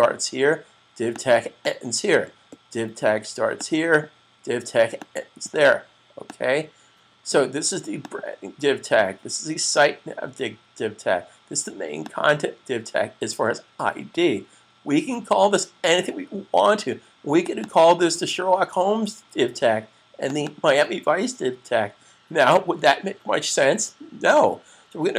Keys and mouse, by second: 15.4 click, 17.5 double click, 20.1 click, 20.4 double click.